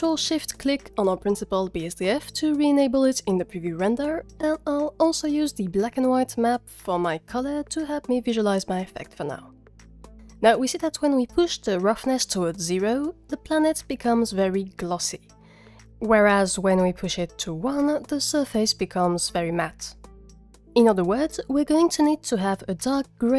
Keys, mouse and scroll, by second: 5.1 click, 10.6 click, 11.1-12.4 drag, 15.5 click.